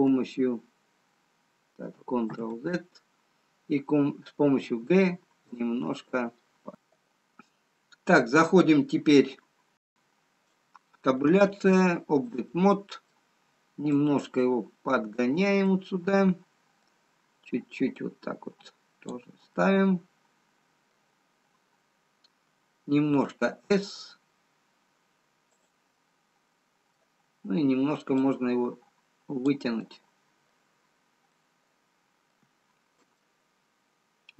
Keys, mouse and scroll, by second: 0.0 h, 2.6 ctrl+z, 4.7 g, 13.1 Tab, 13.1 middle click, 14.5 click, 16.1 middle click, 19.8 middle click, 21.4-22.7 scroll up 3, 23.2 s, 26.2 middle click, 30.5 click, 32.7 middle click, 32.7-33.1 scroll down 2, 33.5 click.